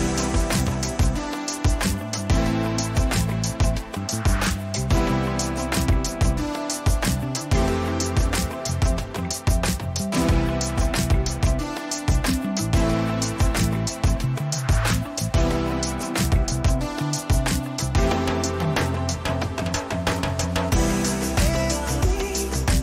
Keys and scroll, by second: 12.6 Return, 14.9 ctrl+j, 18.8 Return.